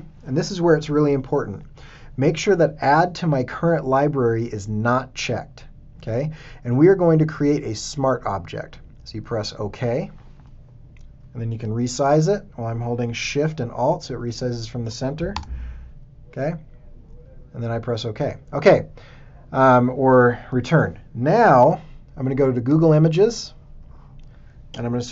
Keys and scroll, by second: 15.3 alt+shift+Return, 15.9 Return, 21.5 super+Tab.